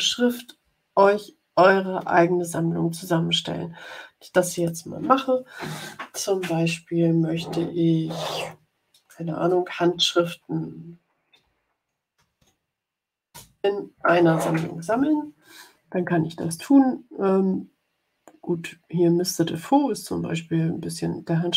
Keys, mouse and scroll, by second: 4.5 click, 9.6-12.8 typing, 13.2 Return, 19.4-21.5 drag.